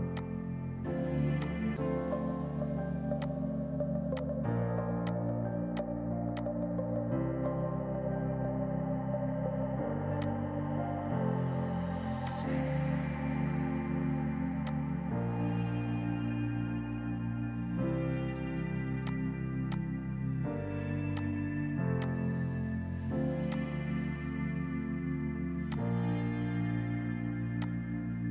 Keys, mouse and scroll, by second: 4.9 ctrl+click, 6.3 click, 10.1 click, 11.3 space, 11.5 Escape, 11.8 F3, 12.2 click, 12.7 right click, 14.4 F2, 14.6 click, 15.3 right click, 19.0 click, 19.6 click, 20.8-21.9 typing, 21.0 click, 21.9 shift+click, 23.4 shift+click, 25.5 F2, 25.6 click, 28.1 right click.